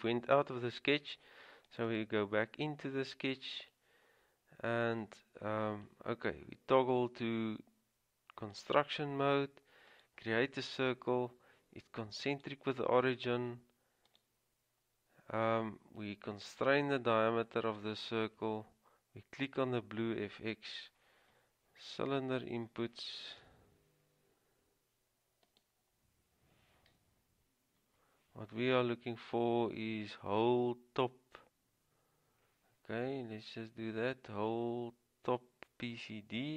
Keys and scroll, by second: 22.8-23.6 typing.